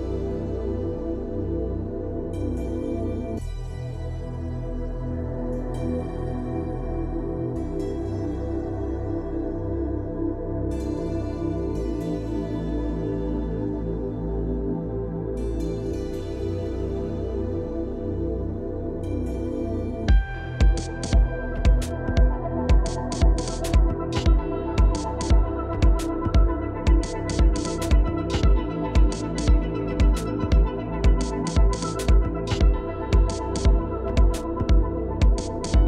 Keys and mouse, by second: 3.1 click, 5.1-6.4 drag, 7.9-15.5 drag, 16.8-17.5 drag, 19.1 click, 19.5-20.7 drag, 21.6-24.6 drag, 25.3-26.3 drag, 26.8 click, 27.5 click, 27.7 click, 33.6 click.